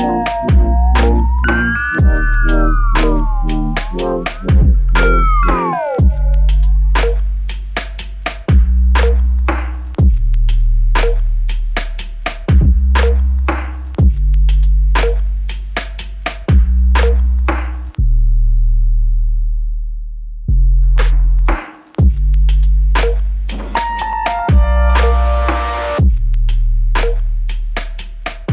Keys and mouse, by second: 3.0-4.4 typing, 8.3 alt+click, 10.5 alt+click, 15.2 ctrl+click, 16.5 shift+click, 21.0 double click, 22.2 shift+click, 23.9 shift+click.